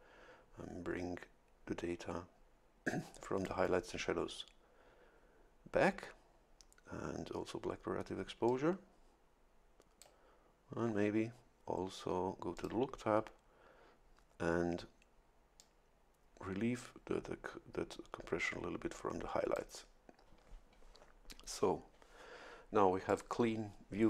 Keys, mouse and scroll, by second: 4.0-6.6 drag, 8.5-10.2 drag, 12.5 click, 15.6-19.8 drag, 23.1-24.0 drag.